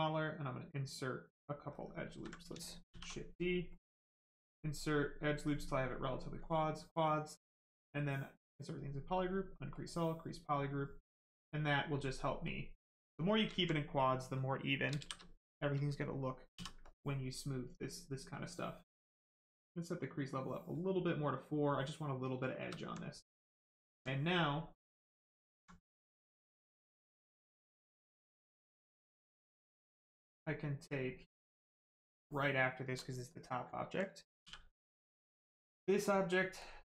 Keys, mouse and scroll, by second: 0.1 click, 2.0 ctrl+z, 2.9 shift+d, 3.4 right click, 4.0 click, 6.1 click, 9.3 click, 10.4 right click, 12.9 right click, 14.9 shift+right click, 14.9 shift+f, 15.6 right click, 16.5 d, 17.5 right click, 19.4 click, 20.8 right click, 22.8 alt+right click, 23.4 alt+right click, 28.9 click, 36.6 ctrl+click.